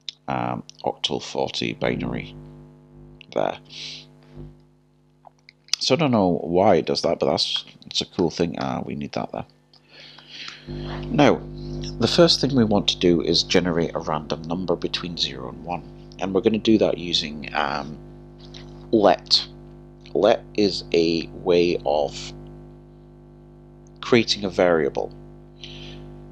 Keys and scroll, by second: 8.2 typing.